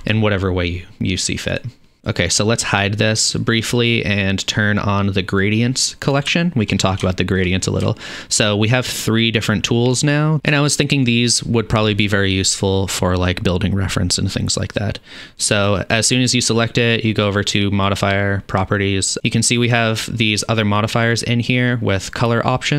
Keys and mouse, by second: 1.8 middle click, 2.0-5.5 drag, 5.5-8.8 middle drag, 8.8 click, 8.9-16.0 middle drag, 16.0 click, 16.0-20.0 middle drag, 20.0 click, 20.0-21.1 middle drag, 21.1 click, 21.2-22.7 middle drag.